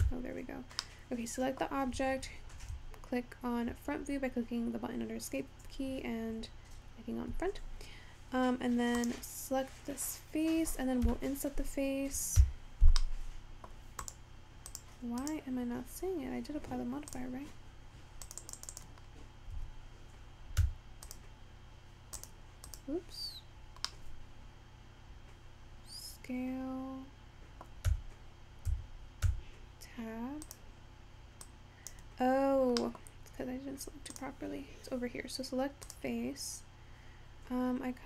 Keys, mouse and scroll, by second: 0.5 Tab, 0.9-5.0 middle drag, 9.2 click, 12.5 Escape, 15.6 click, 18.7 click, 19.3-21.4 scroll up 4, 21.6 click, 22.2-24.7 drag, 24.7-28.4 middle drag, 28.4 Tab, 28.9 Tab, 31.9 click, 35.3-36.0 scroll down 3, 36.0 click.